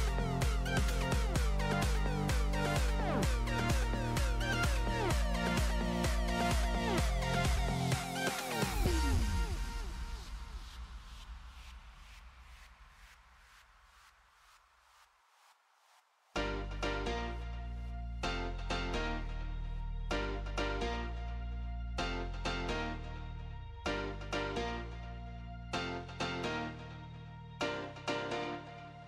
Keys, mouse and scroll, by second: 0.3 KP_0, 0.4 middle click, 0.7 click, 1.0-1.4 scroll down 1, 1.4-2.4 drag, 2.5 KP_1, 3.1-3.5 middle drag, 3.5 click, 3.8 KP_7, 4.3 shift+d, 5.7-6.2 middle drag, 6.2 click, 6.3 middle click, 7.1 click, 7.4 r, 9.1 shift+a, 10.3 r, 12.7 shift+a, 13.1 alt+g, 13.2 alt+r, 13.4 middle drag, 13.6-13.9 scroll up 2, 13.9 click, 14.2-15.6 drag, 15.6-17.4 drag, 18.1 s, 18.6 ctrl+KP_0, 19.0-19.8 drag, 19.8 KP_0, 20.1 click, 20.4 click, 20.6 Tab, 20.8 click, 21.2 Tab, 21.6 KP_0, 22.0-22.9 drag, 23.2 click, 23.4 click, 24.2-26.0 drag, 26.2-27.2 drag, 27.4-28.4 drag.